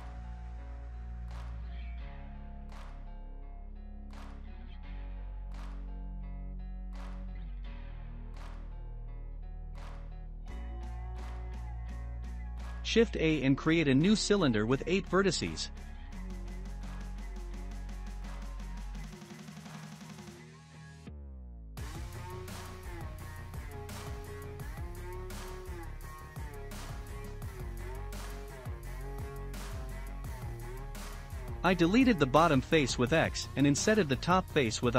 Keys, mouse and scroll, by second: 2.0-2.4 scroll down 2, 2.5-3.6 shift+middle drag, 3.6 Tab, 3.9 click, 4.5-5.0 scroll down 2, 5.0-11.6 middle drag, 11.6 shift+a, 17.5-21.6 drag, 22.0-24.0 drag, 24.0-25.5 middle drag, 25.5 Tab, 26.5-27.8 drag, 27.8 shift+middle click, 28.6 click, 29.1 x, 30.2-33.4 shift+middle drag, 33.4 click, 34.5 l.